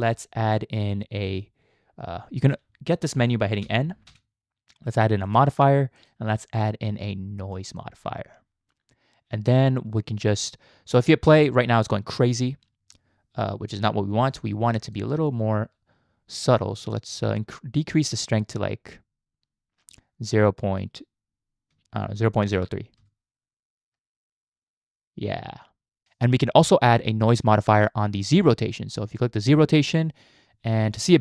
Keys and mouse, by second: 3.6 n, 4.1 n, 6.1-7.8 drag, 11.2 space, 14.2 space, 14.4 click, 16.9-22.4 shift+drag, 23.0 space, 27.7 click.